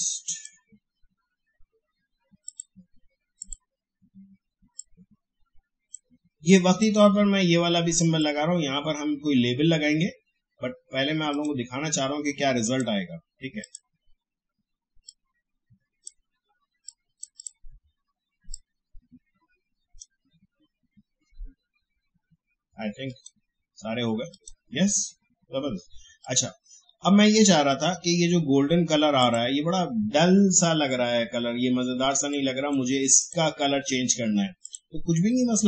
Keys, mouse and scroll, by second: 11.3-22.4 drag, 23.1 click, 30.5 alt+scroll up 1, 31.3 alt+scroll down 1, 32.1 space, 32.3 click, 32.6 space, 33.1 click.